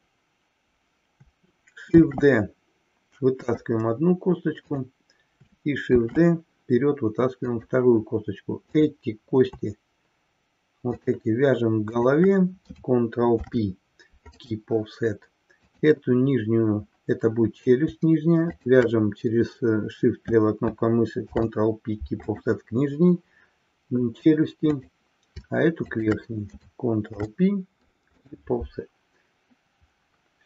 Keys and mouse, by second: 2.0 shift+d, 4.6 click, 5.9 shift+d, 10.8 shift+click, 12.0 shift+drag, 13.2 ctrl+p, 15.5 click, 18.5 shift+click, 21.1 ctrl+p, 26.0 shift+click, 27.2 ctrl+p.